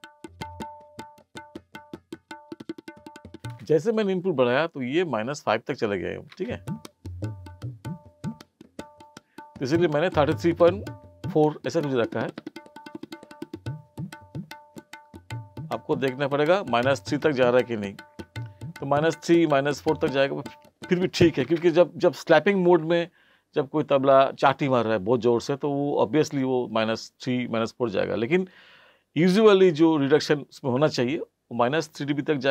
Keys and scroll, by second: 3.5 space, 6.3 space, 21.5 space.